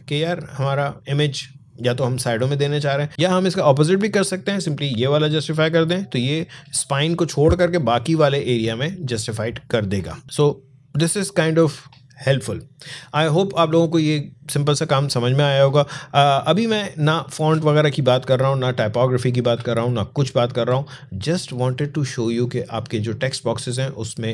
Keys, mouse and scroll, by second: 5.1 click, 10.2-10.8 scroll down 1, 15.4 click, 16.7-17.2 alt+scroll up 1, 17.4 space, 17.5 click, 17.9 space, 18.3 click, 18.5 space, 19.9 alt+scroll down 1.